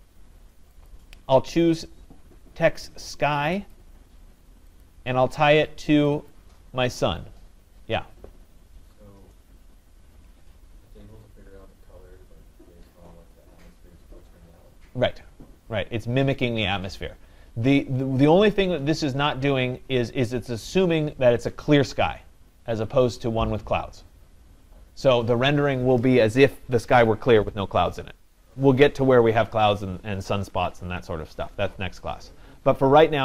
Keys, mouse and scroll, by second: 0.9 click, 1.8 scroll down 3, 3.7 click, 4.4 scroll, 4.9 click, 6.1 scroll, 6.3 click.